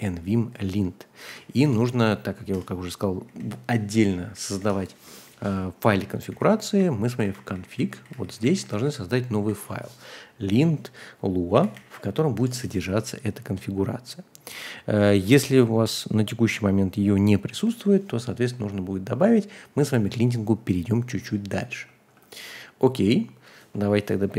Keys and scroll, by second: 1.3-10.0 typing, 1.6 Return, 11.2-12.9 typing.